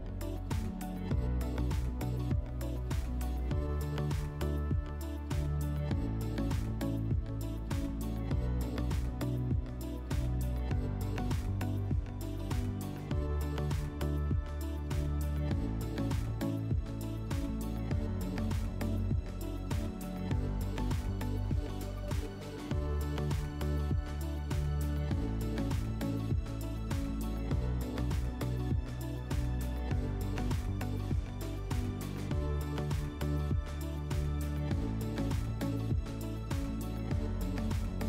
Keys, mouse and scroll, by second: 1.9 click, 35.7 click, 36.5 click.